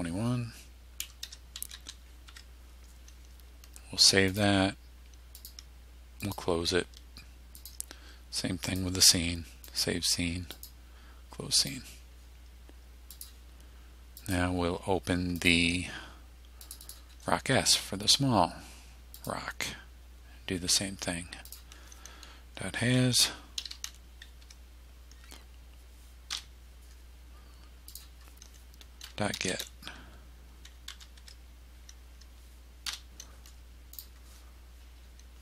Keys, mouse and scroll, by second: 0.8-2.3 typing, 2.3 Tab, 4.3 click, 5.4 click, 6.3 click, 7.6 click, 8.7 click, 9.7 click, 10.6 click, 11.6 click, 13.2 click, 14.2 click, 15.4 click, 16.7 click, 19.2 click, 21.5 click, 23.0-24.3 typing, 24.5 Tab, 26.3 Delete, 28.0 click, 28.8-31.0 typing, 31.2 Tab, 32.9 Delete, 34.0 click.